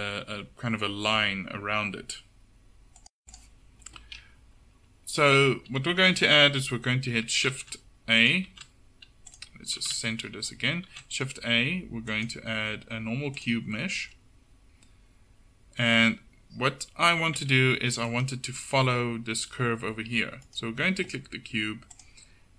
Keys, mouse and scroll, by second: 8.3-9.9 drag, 8.6 shift+a, 9.9 shift+c, 11.0 shift+a, 17.5 Tab, 18.0 Tab, 18.6 Tab, 19.7 Tab.